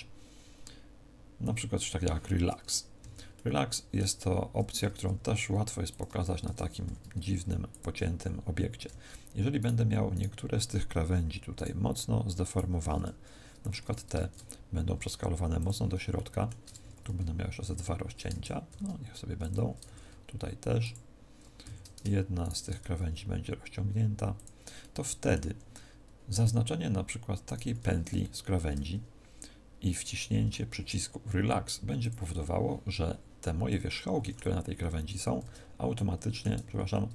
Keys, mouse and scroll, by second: 2.5-2.9 scroll up 4, 2.9 a, 3.3 middle click, 5.0 ctrl+r, 5.9 click, 6.2 a, 6.8 ctrl+r, 8.1 click, 8.1 a, 9.5 alt+shift+right click, 10.1 alt+shift+right click, 13.8 s, 15.6 click, 16.0 shift+middle click, 16.8 ctrl+r, 18.6 ctrl+r, 19.4 click, 19.8 ctrl+r, 20.8 click, 21.6 a, 22.4 alt+shift+right click, 22.8 s, 24.4 click, 24.7 middle click, 25.4 a, 27.4 alt+shift+right click, 28.1 middle click, 31.9 click, 33.6 middle click, 35.0 a, 35.4 z, 35.8 middle click, 36.6 ctrl+z, 36.8 ctrl+z.